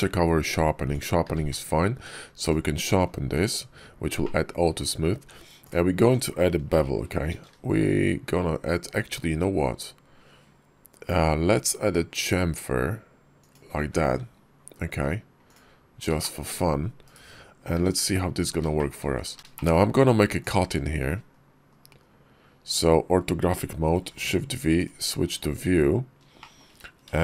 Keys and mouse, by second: 1.1 q, 3.2 Tab, 4.1 click, 5.5 alt+click, 7.1 ctrl+b, 15.3 click, 16.0 shift+click, 18.6 shift+click, 19.4 shift+Tab, 19.4 shift+click, 21.1 KP_5, 21.5 KP_5, 22.5 click, 22.5 KP_5, 23.8 shift+v, 26.3 shift+click.